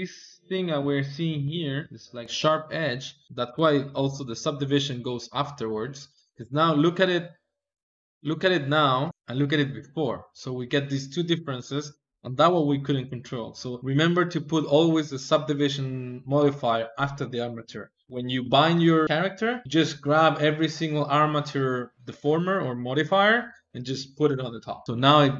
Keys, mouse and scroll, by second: 3.2-4.7 drag, 4.9-9.0 drag, 9.0 shift+middle click, 9.5-12.5 drag, 13.2-15.8 drag, 24.9-25.3 middle drag.